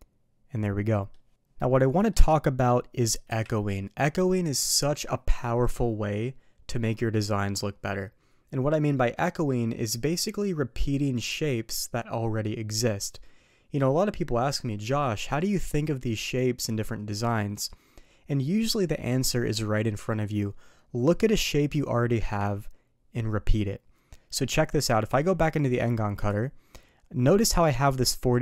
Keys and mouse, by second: 1.9 middle click, 3.3 KP_3, 25.1 d.